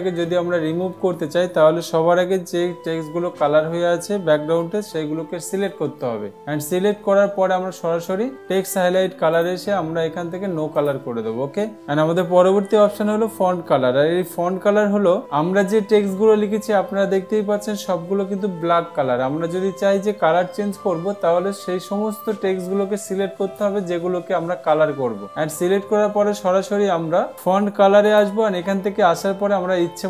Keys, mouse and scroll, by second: 6.1 ctrl+a, 9.9 click, 22.8 click, 28.6 click.